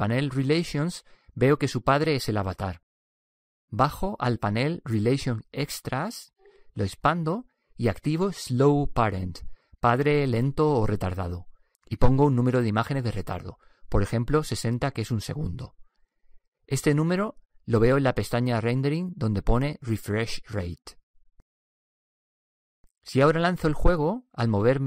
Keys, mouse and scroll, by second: 3.7-5.4 drag, 6.0-8.3 drag, 9.4-11.3 drag, 12.7-14.5 drag, 19.0-22.6 drag.